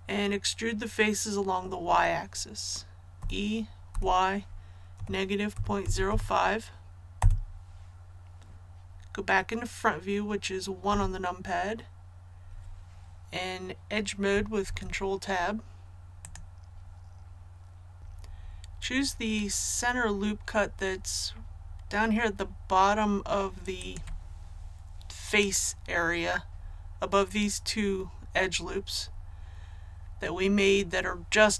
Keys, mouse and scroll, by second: 3.1-3.9 typing, 5.5 KP_Decimal, 5.8 KP_0, 6.0 KP_5, 7.1 Return, 10.8 KP_1, 14.6 Tab, 16.2 click, 18.0 a, 23.7 right click.